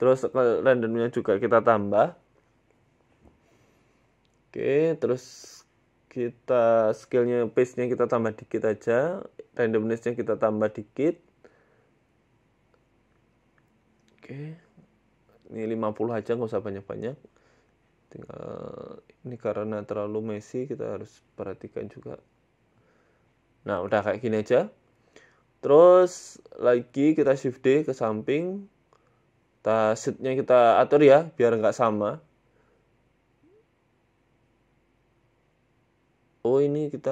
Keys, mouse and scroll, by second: 1.3 middle click, 2.9 s, 4.9 click, 6.2 shift+click, 8.5 click, 9.4 shift+click, 12.6 shift+click, 15.1 click, 17.2 right click, 17.6 s, 18.7 KP_1, 19.5 g, 22.0 click, 22.4 click, 23.3 middle click, 27.0 shift+d, 29.6 click, 30.1 middle click, 31.0 shift+d, 32.6 middle click, 33.5 KP_1, 34.5 g, 35.4 s, 36.9 g.